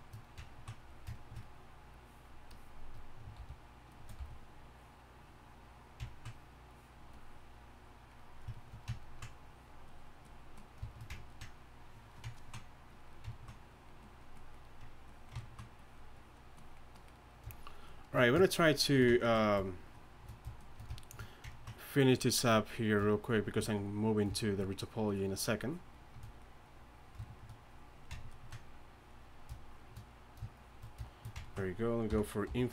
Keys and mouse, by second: 1.9-6.2 drag, 3.4 shift+f, 4.2 f, 8.6-9.0 drag, 9.5-12.4 drag, 12.9-15.4 drag, 22.9-27.2 drag, 32.1 i, 32.5 f.